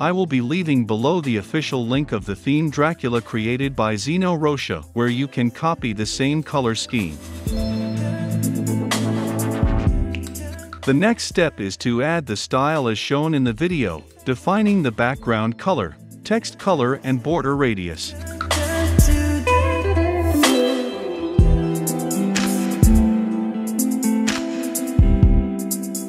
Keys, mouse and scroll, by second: 5.9-7.0 drag, 8.7-10.2 drag.